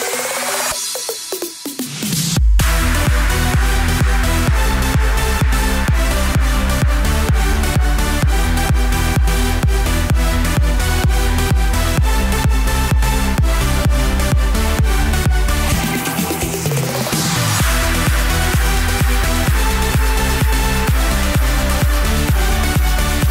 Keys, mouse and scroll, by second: 0.4 shift+z, 0.5 shift+z, 1.0 shift+z, 1.1 click, 1.2 scroll down 3, 1.5-1.9 middle drag, 1.9 click, 4.7-5.6 drag, 5.6 KP_1, 5.8-6.3 scroll up 6, 6.3-7.2 shift+middle drag, 7.2 click, 8.3 scroll down 2, 8.5 middle click, 11.8-12.7 drag, 13.0-13.8 scroll down 8, 13.8-14.2 middle drag, 14.3-14.9 scroll up 6, 14.9-15.5 shift+middle drag, 15.5 scroll up 2, 15.7-17.9 shift+middle drag, 17.9 click, 21.4-23.3 drag.